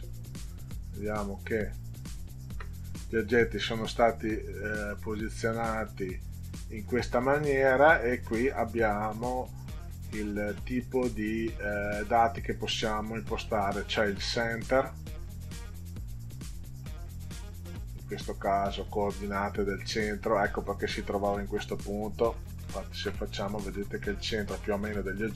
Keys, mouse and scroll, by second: 0.5 ctrl+scroll down 2, 1.3 ctrl+scroll up 2, 2.0 ctrl+scroll up 2, 3.4-4.4 drag, 22.6 ctrl+z.